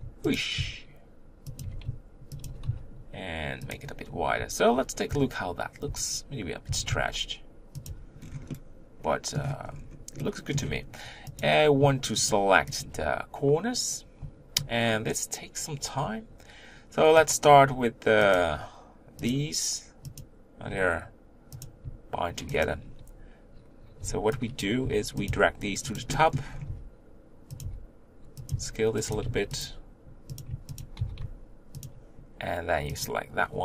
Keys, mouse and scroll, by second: 0.5 s, 1.6 g, 2.5 s, 4.7 z, 5.1 Tab, 5.9 Tab, 6.7 s, 7.9 Tab, 8.2 scroll down 1, 8.5 middle click, 9.4-10.2 scroll up 5, 10.2 middle click, 10.5 scroll up 1, 10.7 Tab, 11.4 click, 12.3 shift+click, 12.8 shift+click, 17.3 click, 18.3 shift+click, 19.3 shift+click, 20.2 shift+click, 21.6 click, 22.6 shift+click, 24.6 b, 25.2 g, 26.1 middle click, 26.7 r, 27.6 g, 28.5 s, 29.0 g, 30.4 click, 30.8 shift+click, 31.0 g, 33.0 click.